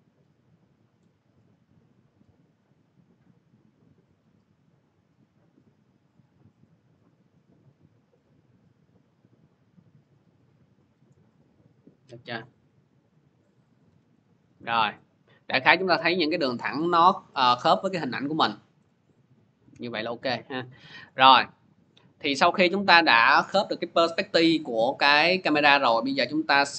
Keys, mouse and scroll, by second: 0.9-5.9 drag, 10.8-14.4 drag, 13.7 v, 14.7 middle click, 15.0 middle click, 16.9 middle click, 17.1 scroll, 18.7-19.5 scroll, 20.2 scroll, 23.9-24.8 scroll, 25.5 scroll.